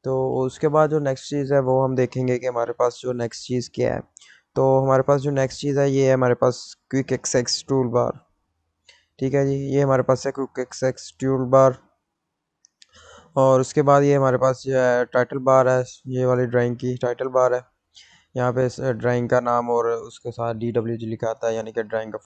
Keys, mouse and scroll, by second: 15.5 click.